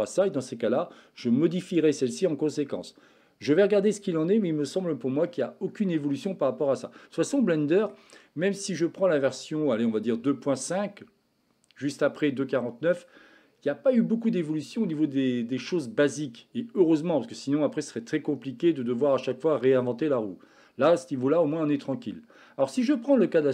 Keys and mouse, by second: 7.2 shift+middle click.